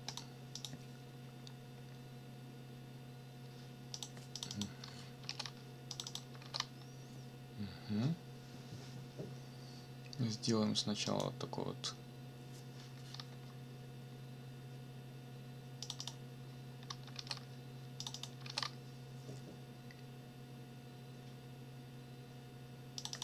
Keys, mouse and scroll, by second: 0.1 click, 0.5 click, 3.9 click, 4.3 click, 5.2 ctrl+v, 5.9 click, 6.4 ctrl+v, 11.1 click, 15.8 click, 17.1 ctrl+v, 18.0 click, 18.4 ctrl+v, 23.0 click.